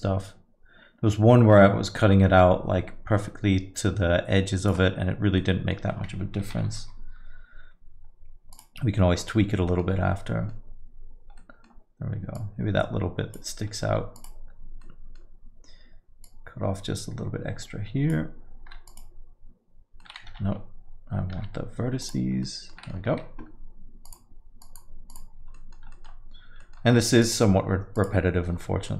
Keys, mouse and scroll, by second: 5.4 middle click, 6.7 ctrl+i, 6.8 x, 6.8 x, 9.7 middle click, 10.0-10.5 scroll up 4, 10.3 middle click, 10.6-11.4 scroll down 2, 11.4 middle click, 11.4 scroll down 1, 12.3 click, 13.8 x, 14.8 middle click, 16.2 click, 18.6 x, 20.0 middle click, 20.6 ctrl+z, 21.3 x, 22.5 middle click, 22.8 middle click, 23.1 Tab, 24.1 click, 24.6 click, 25.5 middle click, 25.5 click, 25.9 middle click, 26.6 middle click, 27.2 click, 27.9 click.